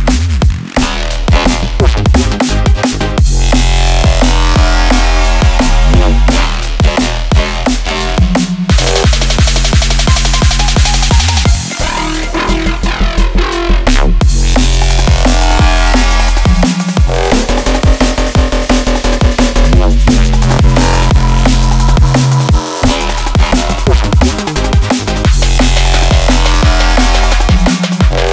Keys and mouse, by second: 6.5-8.0 drag, 6.5-8.0 right drag, 8.3 click, 8.8 Tab, 9.5 middle click, 11.1 3, 11.3 click, 12.1 shift+click, 12.8 shift+click, 13.2 typing, 13.8 click, 13.8 middle click, 13.8 right click, 15.7 middle click, 16.3-16.6 shift+middle drag, 17.3 shift+d, 23.5 middle click, 25.1 shift+middle drag, 25.5 middle click, 26.0 shift+middle drag, 28.2 p.